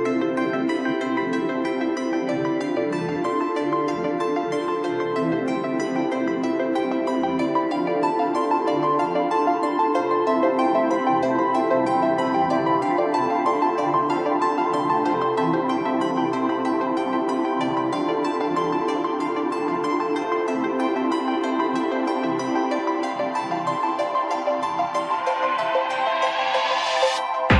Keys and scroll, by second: 13.2 ctrl+t, 20.3 ctrl+t.